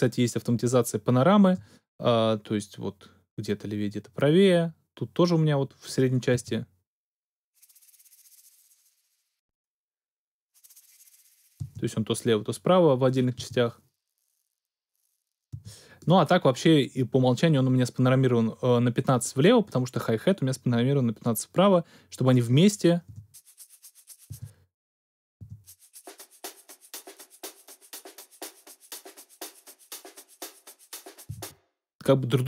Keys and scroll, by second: 6.3 space, 11.6 space, 15.5 space, 23.0 space, 24.3 space, 31.3 space.